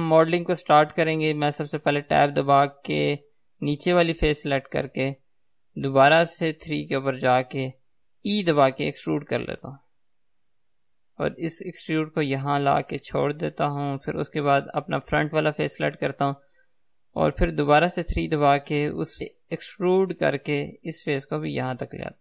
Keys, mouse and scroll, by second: 2.4 Tab, 2.9-5.0 middle drag, 5.0 click, 7.1 KP_3, 8.8 e, 14.3-15.9 middle drag, 15.9 click, 18.1 KP_3, 19.3 r, 19.8 e.